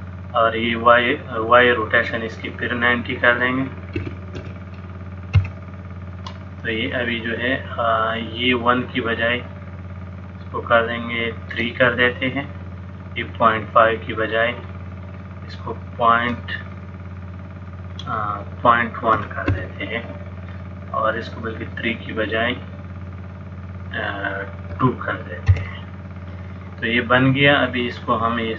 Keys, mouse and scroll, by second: 2.3 click, 8.5 click, 16.3 KP_Decimal, 18.1 click, 23.2 click, 27.7 click.